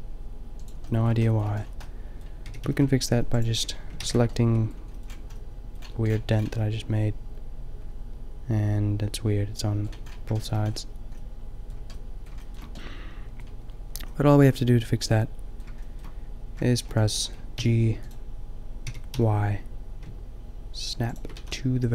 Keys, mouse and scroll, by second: 0.7 click, 2.5 g, 4.0 ctrl+z, 10.8-12.0 middle drag, 12.1 middle click, 14.4-15.4 middle drag, 15.5 middle click, 17.6 g, 18.8 g, 21.2-21.9 drag, 21.3 a.